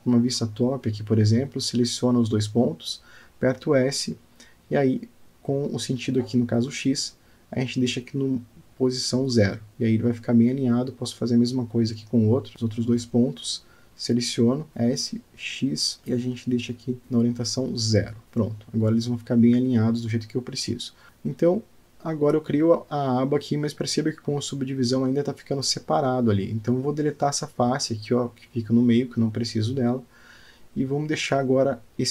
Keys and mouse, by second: 1.1 click, 1.6-3.5 middle drag, 3.8 alt+shift+middle click, 5.5 click, 6.7 s, 12.5 click, 14.9 s, 21.3-22.6 middle drag, 23.4 click, 24.8 Tab, 25.7-26.9 middle drag, 27.0 Tab, 27.5-28.6 middle drag, 29.1 click, 30.0 x.